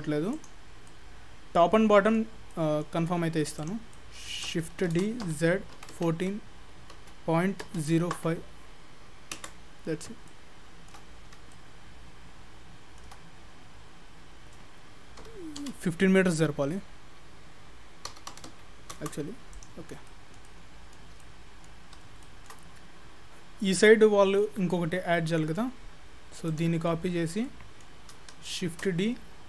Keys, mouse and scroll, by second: 0.4 click, 0.9 middle click, 2.6 middle click, 3.6 click, 4.0 middle click, 5.0 shift+d, 10.0-10.3 scroll up 3, 10.3 shift+middle click, 11.2-11.5 scroll up 2, 11.5 shift+middle click, 13.5-14.0 scroll down 1, 14.0-14.4 scroll up 1, 15.2 g, 19.5 click, 19.9-20.5 scroll down 5, 20.1 middle click, 20.5 middle click, 21.2 middle click, 21.9-22.2 scroll up 4, 22.2 shift+middle click, 22.8 scroll down 2, 24.4 middle click, 26.5 click, 26.9 middle click, 28.7 shift+d.